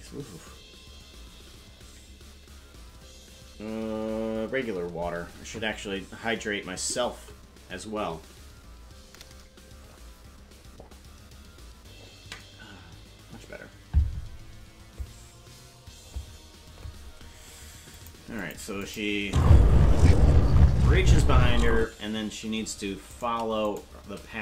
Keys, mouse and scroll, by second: 18.0 click, 18.4 click, 18.8 click, 19.2 space, 21.8 space, 23.2 right click, 23.7 shift+right click.